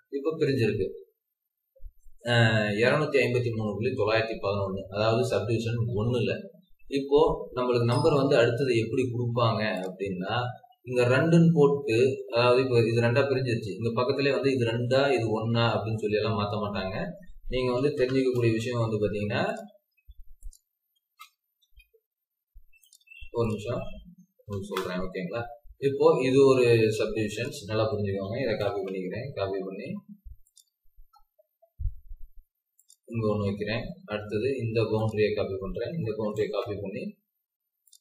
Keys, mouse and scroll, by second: 11.8 scroll down 1, 12.2 scroll up 1, 17.5-17.9 typing, 27.8-28.6 typing, 31.0 scroll up 1, 31.7-32.4 typing, 33.2 Escape, 33.2 scroll down 3, 35.8-36.2 typing.